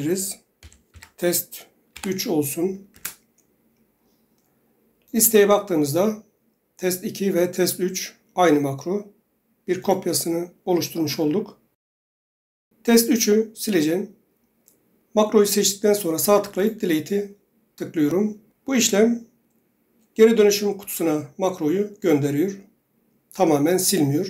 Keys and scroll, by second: 0.0-1.8 typing, 2.8 Return.